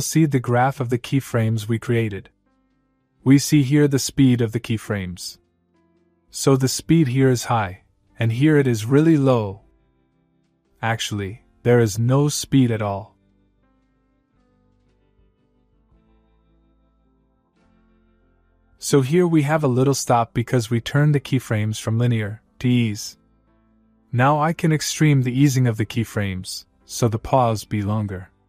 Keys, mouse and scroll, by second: 1.6-4.0 click, 6.5-7.9 click, 15.1-16.8 click, 17.4 space, 20.2-21.0 click, 20.8 space, 22.3 space, 22.7-23.2 click, 27.0-28.1 click.